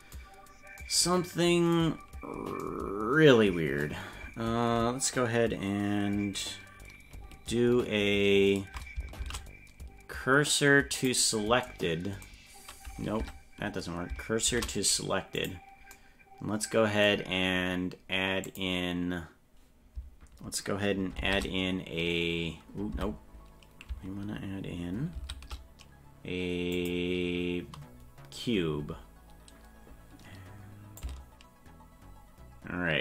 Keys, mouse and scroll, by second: 9.2 shift+s, 13.2 Tab, 14.4 shift+s, 18.4 click, 21.2 shift+a, 22.9 Tab, 25.1 shift+a, 31.0-33.0 ctrl+drag.